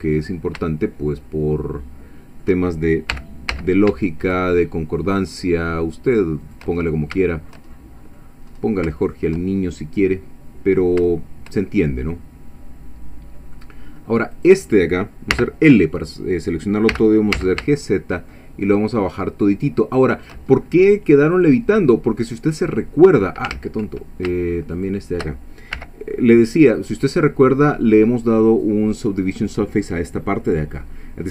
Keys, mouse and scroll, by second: 0.2-0.7 scroll up 3, 0.7-2.6 shift+middle drag, 3.1 g, 3.5 z, 6.4 shift+click, 6.8 shift+scroll down 2, 7.2 shift+click, 7.2-8.3 shift+middle drag, 8.5 scroll up 2, 9.0-11.0 shift+middle drag, 11.1-13.7 shift+middle drag, 14.3 click, 15.3 l, 16.9 g, 17.3 z, 20.2 shift+click, 20.6 shift+scroll down 2, 20.9-22.9 middle drag, 23.5 ctrl+z, 24.8 shift+click, 25.8 l, 26.5 scroll down 2, 26.9 middle click, 27.8 scroll up 2, 30.8 scroll up 2.